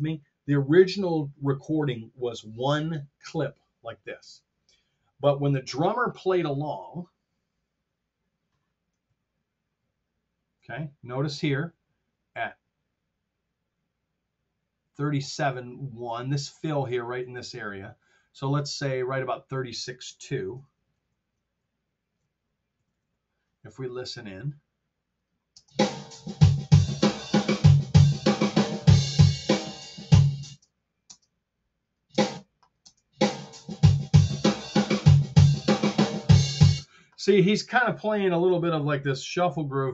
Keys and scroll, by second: 9.0 super+z, 11.4 t, 20.9 shift+super+z, 21.5 shift+super+z, 22.9 r, 24.3 F7, 25.5 space, 30.5 space, 36.7 space.